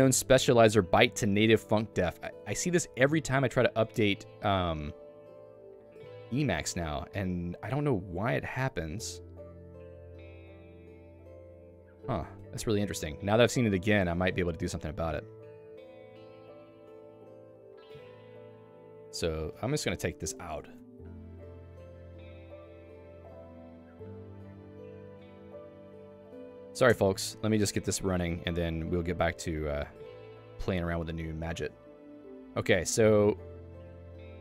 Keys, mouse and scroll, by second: 6.3 click, 6.4 Escape, 12.4 Escape, 14.1 a, 14.5 Up, 15.7 Escape, 16.9 Return, 17.5 Escape, 17.9 a, 19.5 Escape, 19.8-24.3 typing, 25.1 ctrl+s, 26.2 a, 26.9 Return.